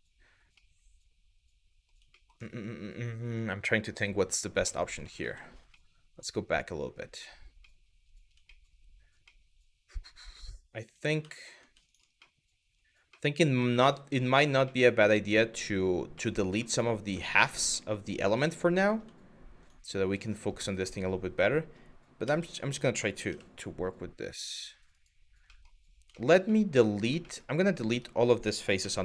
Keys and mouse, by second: 0.3-1.5 middle drag, 4.4 middle click, 4.8 ctrl+z, 5.5 middle click, 6.8 middle click, 7.4 middle click, 8.2 shift+middle click, 9.0 middle click, 10.5 click, 11.0 shift+middle click, 11.5 shift+click, 11.9 middle click, 12.9 middle click, 13.9 shift+middle click, 14.4-15.6 middle drag, 15.8 middle click, 16.3 shift+middle click, 16.7 middle click, 17.3 shift+middle click, 18.2 middle click, 19.8 shift+click, 20.3 middle click, 21.9 s, 22.9 y, 25.1 middle click, 25.8 shift+middle click, 26.2 middle click, 27.0 shift+middle click, 27.5 Tab, 28.4 z.